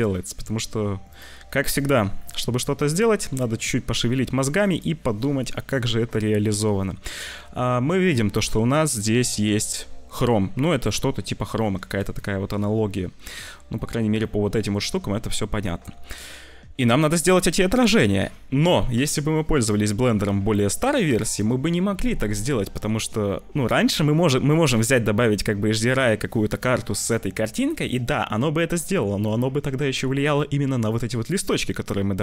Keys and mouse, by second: 1.7 click, 2.8 click, 4.4-11.9 drag, 12.2 click, 12.3 middle click, 13.9 middle click, 14.3 middle click.